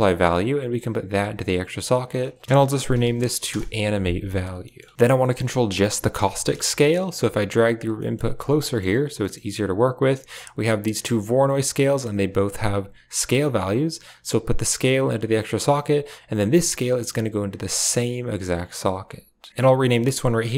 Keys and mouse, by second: 0.1 typing, 0.4-1.3 drag, 1.9 click, 2.0-3.4 drag, 5.1 middle click, 5.3 click, 5.5 g, 6.4 g, 6.9 click, 7.0 g, 7.8 middle click, 8.0 click, 8.1 g, 8.5 click, 9.1 middle drag, 10.5 click, 11.0 click, 13.9-15.0 drag, 15.2 click, 16.9-18.6 drag, 19.4 click, 19.6 click, 19.7-20.5 drag.